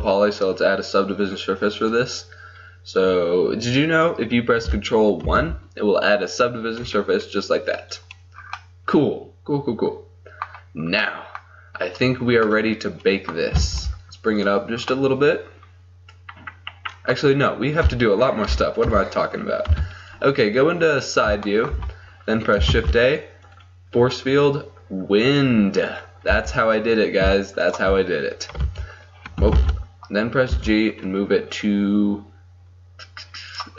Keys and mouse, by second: 1.9-5.3 drag, 5.3 ctrl+1, 8.5-9.9 drag, 9.9 middle click, 12.1-14.5 right drag, 13.6 g, 15.8-17.0 middle drag, 18.5 KP_3, 18.9 KP_5, 19.7 KP_5, 22.8 shift+a, 26.4 r, 28.7 h, 29.8 ctrl+z, 30.6 g.